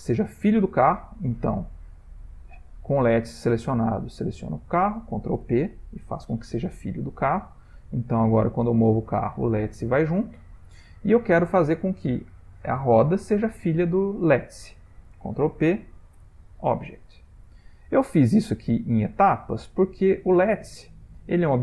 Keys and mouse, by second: 4.1 shift+click, 5.4 ctrl+p, 7.1 click, 8.2 click, 12.6 click, 14.2 shift+click, 15.4 ctrl+p, 17.2 click, 18.2 click.